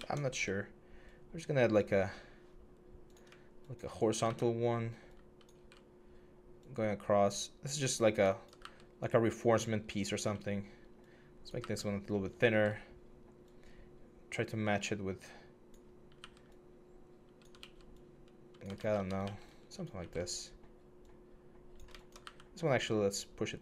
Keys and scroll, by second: 0.1 e, 4.0 w, 8.4 w, 9.9 w, 11.4 r, 11.4 w, 16.0 w, 17.4 ctrl+f, 18.6 ctrl+z, 19.0 ctrl+d, 19.8 r, 22.0 w.